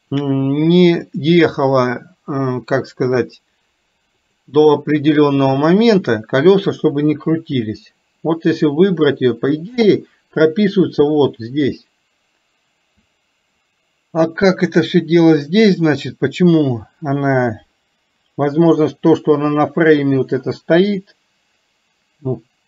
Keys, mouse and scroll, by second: 1.1 click, 4.4 click, 5.6 click.